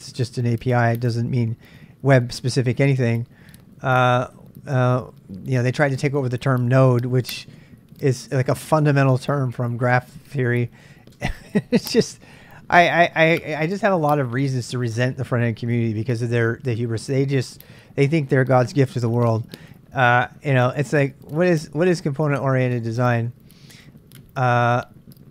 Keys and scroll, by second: 22.6-23.7 typing.